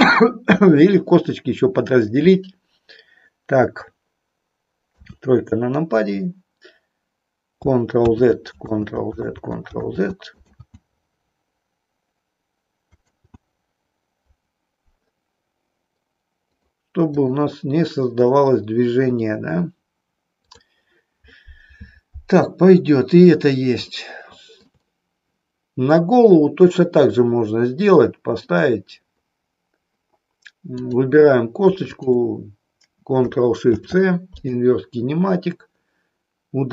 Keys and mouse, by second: 4.8 KP_3, 8.1 ctrl+z, 16.4 click, 17.2 click, 23.9 shift+middle click, 30.7 click, 31.8 shift+click.